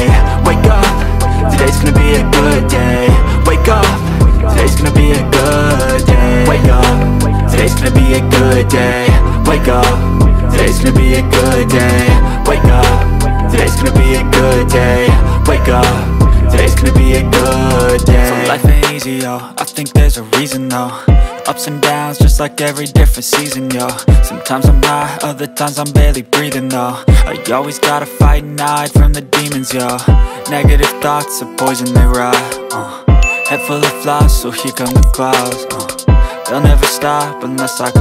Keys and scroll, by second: 11.2 alt+Tab, 14.2 ctrl+a, 16.7 ctrl+c, 26.0 ctrl+v.